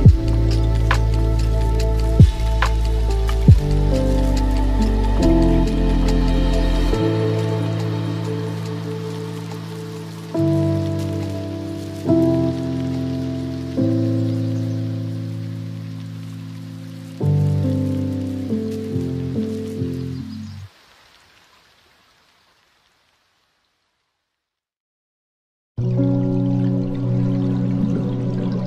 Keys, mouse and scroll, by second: 1.6 s, 7.4-12.2 middle drag, 12.2 click, 13.0-15.0 middle drag, 15.0 s, 18.0-23.4 middle drag, 23.4 ctrl+z, 24.1-26.8 middle drag, 26.8-28.6 drag.